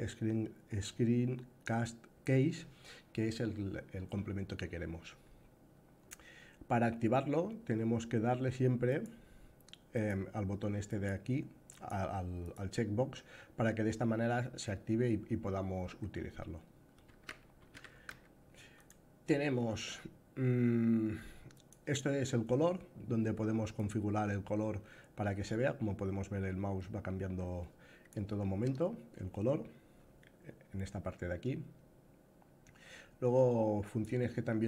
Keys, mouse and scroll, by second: 16.8 a, 17.4 a, 17.4 s, 21.3 click, 33.5-34.6 drag.